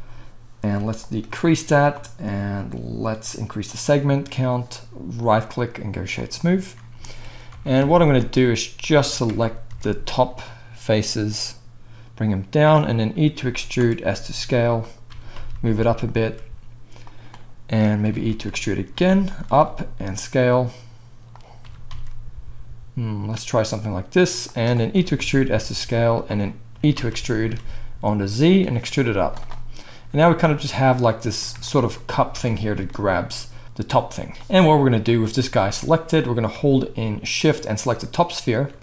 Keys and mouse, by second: 7.5 Tab, 7.8 z, 9.0 g, 12.9-33.0 right drag, 13.3 e, 15.1 g, 16.2 s, 18.0 e, 19.5 s, 21.6 g, 24.9 e, 26.7 e, 29.1 z, 32.3 Tab, 35.1 middle click, 37.4 shift+middle click.